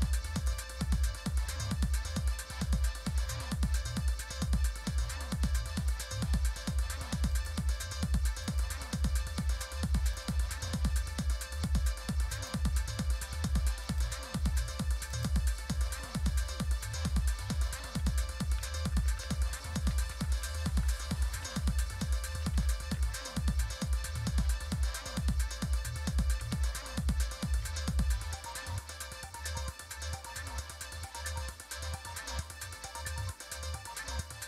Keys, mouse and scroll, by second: 0.5-5.9 drag, 5.9 typing, 7.3-8.5 right drag, 8.5 click, 8.5 typing, 10.2 click, 12.4 click, 12.4 typing, 13.8-15.1 right drag, 15.1 click, 15.1 typing, 19.0 Down, 19.2 Down, 19.9 Up, 20.1 Up, 20.8 Return, 21.0 Return, 21.4 Up, 21.6 Up, 21.8 Up, 22.3 Up, 22.9 Right, 23.4 Right, 23.5 Right, 23.6-24.0 Right.